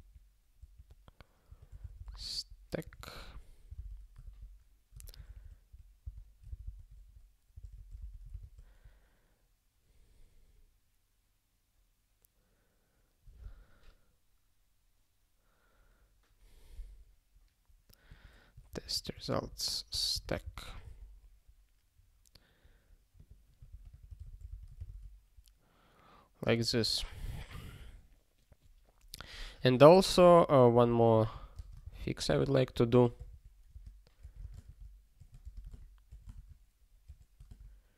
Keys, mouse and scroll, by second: 1.5-3.6 typing, 4.2 ctrl+p, 5.0 ctrl+a, 5.3 alt+f, 5.4 alt+f, 6.0 alt+b, 7.0 -, 8.4 ctrl+s, 18.1 click, 18.7 ctrl+f, 18.9-20.8 typing, 20.9 ctrl+s, 23.1 click, 23.7 ctrl+f, 23.9 -, 24.9 ctrl+s, 29.3 click, 29.9 ctrl+a, 30.1 Return, 30.3 ctrl+p, 30.7 Tab, 31.1-37.1 typing, 34.4 super+space.